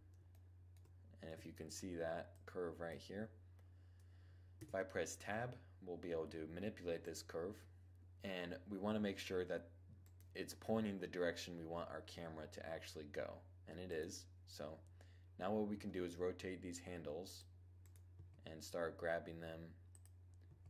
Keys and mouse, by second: 1.8-3.6 drag, 4.2 Tab, 6.7-8.5 right drag, 9.5 right click, 10.4-12.1 middle drag, 13.7-15.1 right drag, 15.2 r, 16.9 click, 17.7 right click, 17.7 g, 18.7 click, 19.5-20.6 drag, 20.0 g.